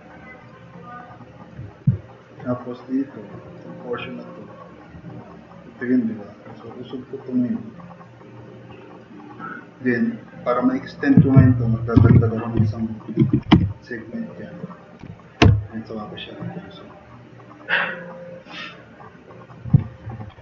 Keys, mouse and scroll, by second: 0.2 drag, 0.7-1.3 drag, 1.9 click, 6.6 click, 7.7-9.0 drag, 12.0-17.6 typing, 12.7 click, 14.6 click, 14.7 click, 15.1 click, 16.3-19.5 drag, 19.8 e.